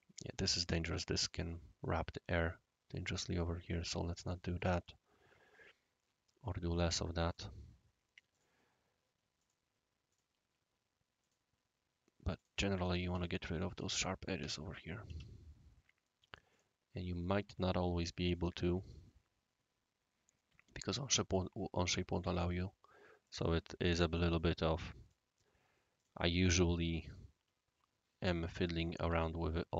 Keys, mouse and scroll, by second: 0.5-1.5 right drag, 2.3-2.9 right drag, 3.7 click, 4.3-4.6 middle drag, 4.8-6.7 right drag, 7.2 click, 8.3 click, 9.4 click, 10.1 click, 11.2 click, 12.3 click, 12.9 Down, 13.1 Down, 13.7 Down, 14.3 Down, 15.0 Down, 16.5 click, 17.2-18.4 right drag, 20.3 right click, 22.3 click, 23.2 click, 23.8-25.1 middle drag, 24.4 right click, 25.9 click, 27.0 click, 28.7 click, 28.9-29.4 typing, 29.1 Tab.